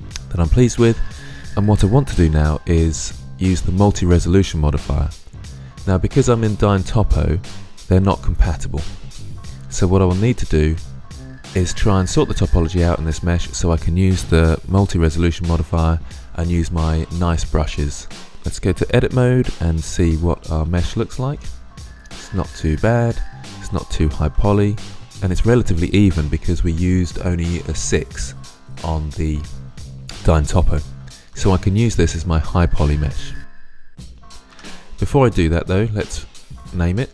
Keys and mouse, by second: 20.7-22.9 middle drag, 24.3 middle drag, 25.0 middle drag, 25.8-27.0 middle drag, 30.9-34.3 middle drag, 34.3 Tab, 36.2-37.1 middle drag.